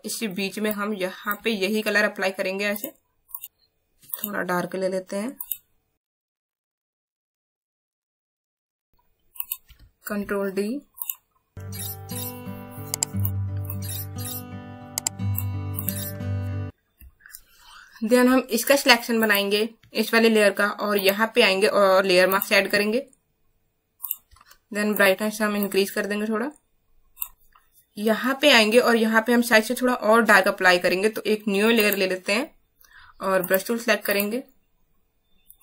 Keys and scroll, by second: 8.2 ctrl+z, 24.4 ctrl+z.